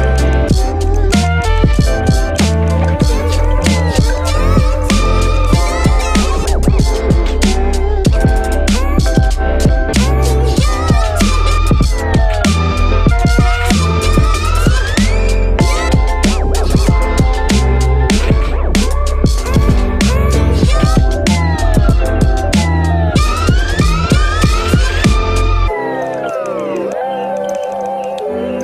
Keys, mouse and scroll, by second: 8.1 space, 14.2 ctrl+-, 14.4 space, 18.0 space, 19.4 space, 27.7 ctrl+-, 27.9 ctrl+=.